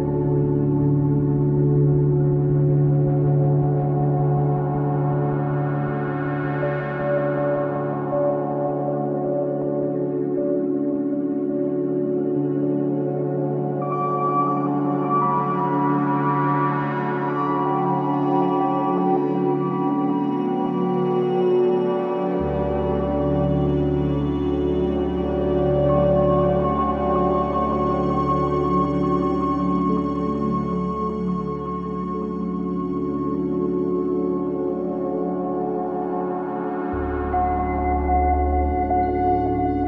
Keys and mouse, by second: 0.1 s, 4.5-6.5 drag, 6.5 KP_1, 8.3 z, 17.5-18.8 middle drag, 19.4 middle click, 22.4-25.6 middle drag, 24.1 KP_3, 25.4 s, 27.8-30.0 drag, 28.5 KP_1, 30.0 Tab, 38.1 z.